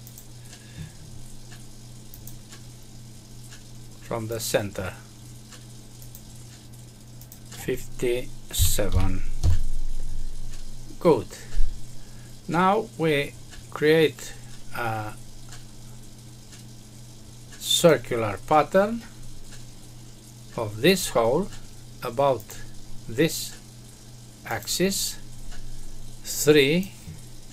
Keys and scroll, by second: 9.3 Return.